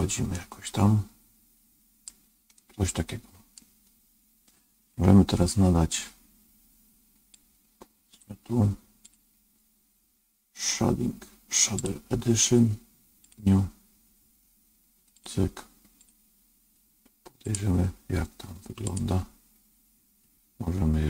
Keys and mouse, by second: 0.3-2.0 middle drag, 2.5-3.5 middle drag, 7.5 click, 8.9-11.7 drag, 13.2-17.1 drag, 17.4 click, 18.8 click.